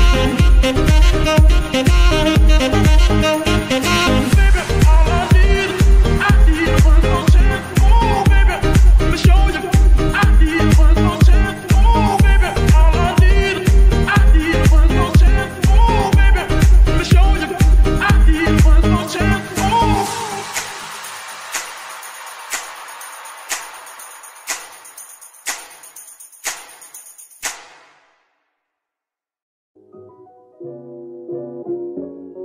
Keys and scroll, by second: 3.3 KP_Subtract, 3.7 ctrl+v, 4.6 Return, 14.6 ctrl+s, 25.0 ctrl+Tab, 27.4 g, 27.5 y, 31.7 Escape.